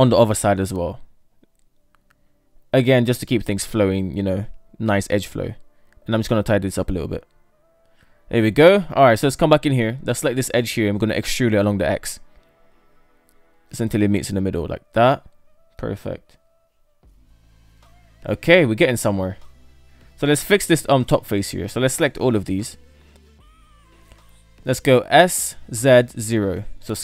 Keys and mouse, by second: 0.8 ctrl+r, 3.4 Tab, 3.6 KP_3, 4.1 Tab, 4.9 shift+middle click, 6.1 right click, 6.7 shift+right click, 7.6 Tab, 8.1 KP_7, 8.5 Tab, 9.2 shift+middle click, 9.3 shift+middle click, 10.1 right click, 10.8 shift+right click, 13.1 e, 14.8 shift+middle click, 16.4 shift+middle click, 17.1 Tab, 17.4-18.8 middle drag, 19.0-19.7 middle drag, 20.4 Tab, 21.0 right click, 21.2 KP_3, 22.1 right click, 22.9 ctrl+right click, 24.5 s.